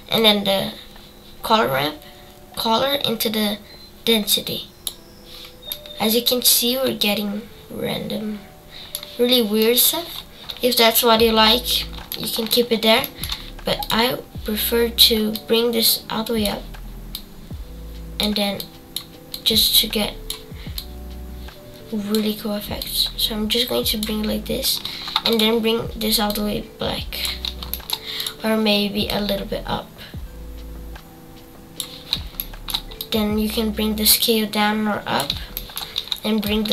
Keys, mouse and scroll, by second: 5.7-8.7 middle drag, 9.6-14.4 middle drag, 14.4 click, 15.3-26.3 drag, 29.1 click, 33.1-36.7 drag.